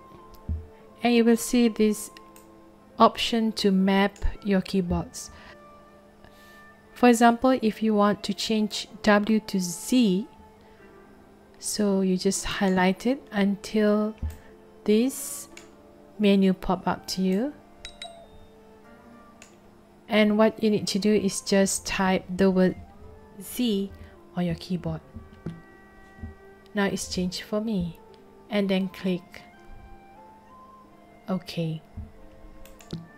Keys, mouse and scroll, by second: 2.3-4.1 drag, 12.5 click, 14.3-15.6 drag, 17.3-19.4 drag, 32.6 click.